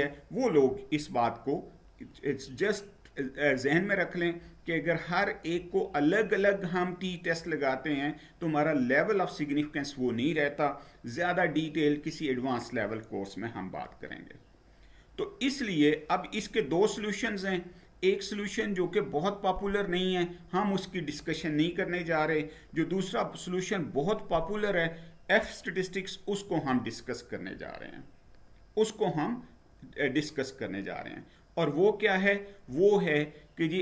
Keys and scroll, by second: 13.7 Down, 26.5 Down.